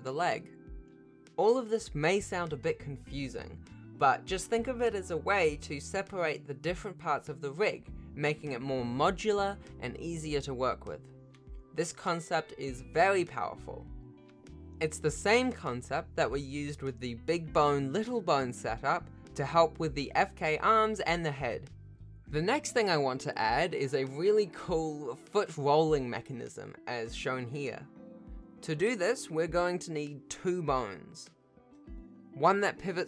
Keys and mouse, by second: 0.1 shift+click, 0.5 ctrl+s, 4.0 alt+g, 4.5 ctrl+s, 5.1 shift+middle click, 15.6 shift+click, 16.2 ctrl+s, 16.9 shift+click, 17.2 g, 21.1 r, 23.4 ctrl+s, 24.5 ctrl+s, 29.5 e, 30.0 click, 30.1 F2, 30.7-32.5 typing, 31.0 alt+g, 31.1 alt+f, 31.3 F2.